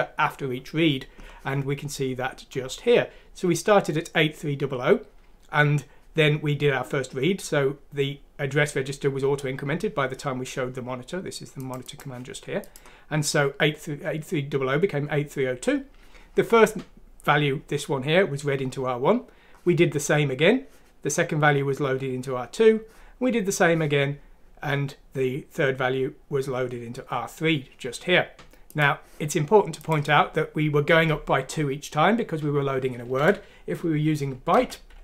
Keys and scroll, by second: 33.2 Left, 34.5 typing.